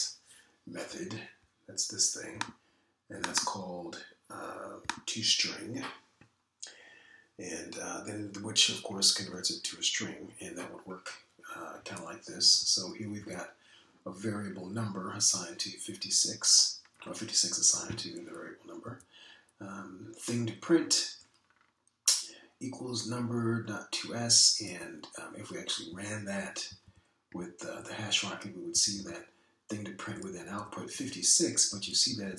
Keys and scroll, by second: 13.4 Up, 13.6 Up, 14.1 Down, 19.8 Down, 25.7 Down, 26.9 Left, 27.1 Left, 27.3 Left, 28.4 Right, 28.6 Right, 28.7 Right, 28.8 Right, 29.7 Left, 29.9 Left, 30.1 Left, 31.1 Right, 31.6 Right, 31.9 Right.